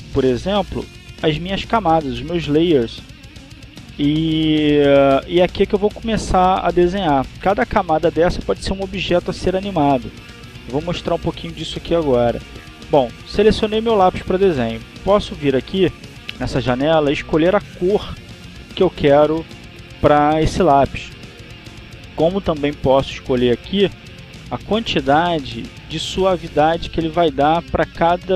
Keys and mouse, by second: 17.0 click.